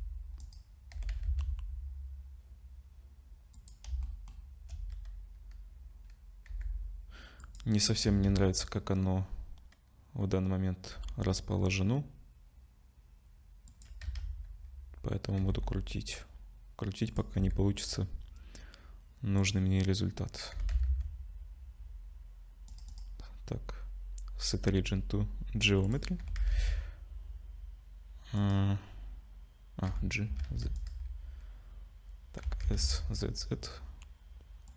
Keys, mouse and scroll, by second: 0.9 r, 4.0 shift+middle click, 6.5 g, 8.1 z, 10.9 r, 14.0 z, 15.4 g, 17.3 r, 20.5 g, 22.9 right click, 26.2 r, 29.9 g, 32.4 s.